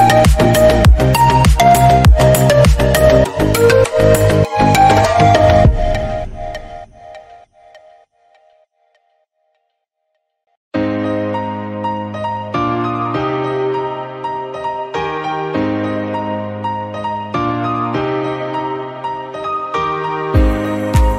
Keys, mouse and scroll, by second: 0.1 s, 1.1-2.9 middle drag, 2.9 shift+d, 3.4 middle click, 3.7 scroll down 1, 4.0 g, 4.6 middle drag, 4.8 scroll up 1, 4.9 middle drag, 5.2 g, 5.7 click, 5.8 scroll down 3, 5.9 middle drag, 6.3-7.4 middle drag, 7.6 shift+middle click, 7.7-8.5 scroll up 3, 8.0 shift+middle drag, 8.5 click, 8.9 s, 9.5 click, 9.6 middle click, 9.8 scroll up 1, 10.0 middle click, 10.3 g, 10.8 click, 10.9 g, 11.4 scroll down 1, 11.6 scroll up 1, 11.7 click, 11.8 g, 12.3-12.8 drag, 12.8-13.2 middle drag, 13.2 click, 13.4 g, 13.9 s, 14.6 g, 14.9 drag, 15.1 scroll down 3, 15.1-15.5 middle drag, 15.5-16.1 scroll up 2, 15.7 middle click, 16.1-16.6 drag, 16.6 g, 17.1 scroll down 1, 17.2 click, 17.4 middle click, 17.7-18.2 scroll up 2, 17.8 middle click, 18.2 scroll down 1, 18.2 middle drag, 18.4 click, 18.6 middle click, 18.8 g, 19.2 drag, 19.4-19.7 middle drag, 19.7 scroll down 2, 19.8-20.3 middle drag, 20.3-20.7 scroll up 3, 20.4 middle click, 20.7 click.